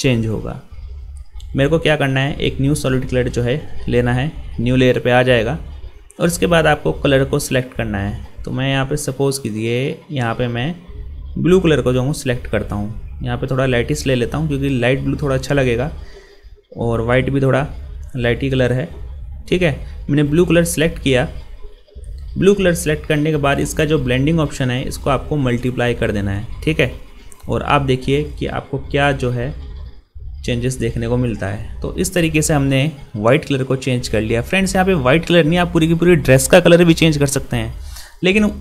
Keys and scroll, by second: 29.1 ctrl+0.